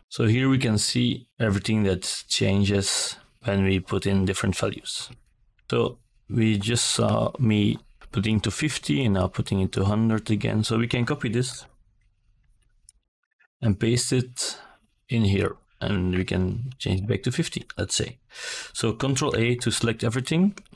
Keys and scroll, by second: 9.1 ctrl+c, 10.0 ctrl+v, 13.6 5, 13.7 KP_0, 16.0 ctrl+a, 20.3 ctrl+Return.